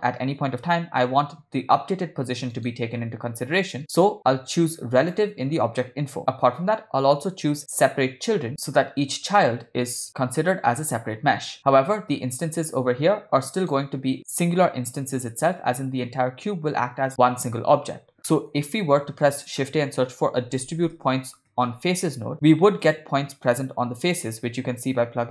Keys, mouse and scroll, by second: 3.7 click, 5.1 drag, 5.6-6.5 drag, 7.8 click, 8.5 drag, 9.1 click, 12.7-13.6 drag, 18.3 middle click, 19.1 shift+a, 23.6-24.2 drag, 24.8 click, 25.0-25.3 drag.